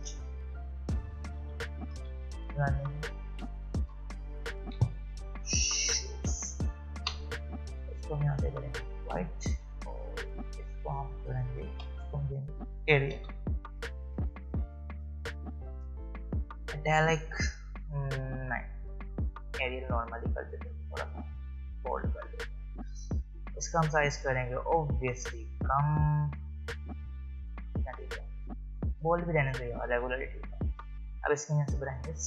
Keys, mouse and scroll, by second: 0.0-5.3 typing, 9.0 click, 12.3-14.2 typing, 15.5 click, 19.4 click, 27.4 click.